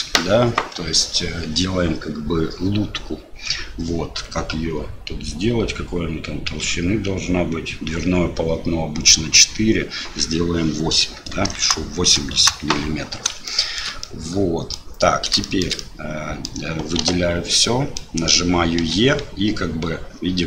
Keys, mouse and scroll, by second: 13.6 shift+middle click, 14.1 middle click, 15.5 shift+click, 15.8 click, 16.9 a, 17.6 click, 18.7 e.